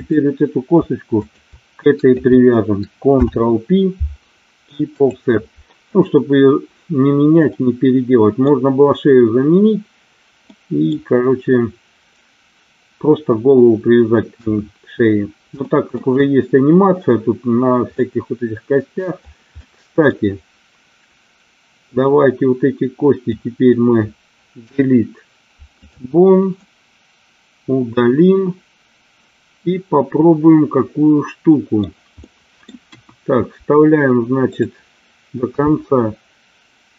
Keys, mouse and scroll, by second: 0.0 click, 3.0 ctrl+p, 7.4 middle click, 10.5 middle click, 14.3 KP_1, 15.6 shift+middle click, 17.9 middle click, 19.4 middle click, 21.9-23.3 drag, 24.5 Delete, 26.6-31.7 middle drag, 32.2 middle click, 32.8 KP_1, 34.4 click, 35.6 e.